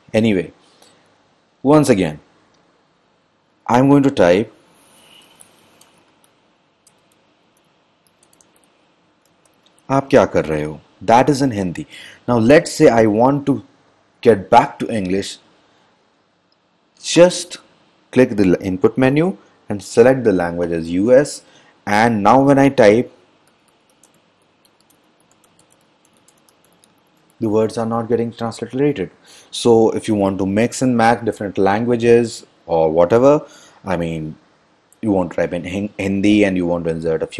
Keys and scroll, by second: 4.9-9.6 typing, 12.8 Return, 13.1 Return, 23.5-27.4 typing.